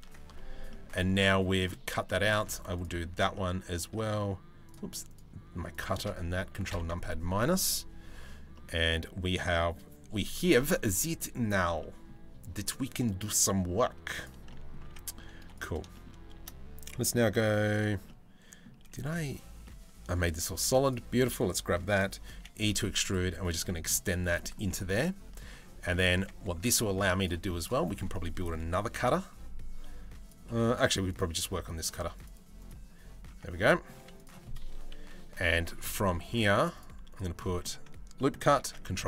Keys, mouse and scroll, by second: 0.3-1.2 middle drag, 1.7 middle drag, 2.9-3.6 middle drag, 4.7 click, 6.4 ctrl+KP_Subtract, 8.2-8.6 middle drag, 10.1-10.4 middle drag, 11.4 middle drag, 12.6 middle click, 13.8 click, 14.1 middle drag, 14.5 Tab, 15.0 Tab, 15.6 shift+middle click, 17.7 middle click, 18.4 z, 18.9 a, 19.2 middle click, 20.2 3, 20.4 click, 22.0 e, 22.8 z, 23.3 middle click, 24.0 middle click, 24.4 Tab, 24.5 click, 25.0 Tab, 25.1 middle click, 25.8 Tab, 26.4 middle click, 30.3 middle click, 30.8 click, 31.8 middle click, 32.2 middle click, 32.9 Tab, 33.2 middle click, 33.6 z, 35.1 middle click, 35.9 ctrl+r, 37.0 middle click, 37.8 middle click, 38.3 ctrl+b.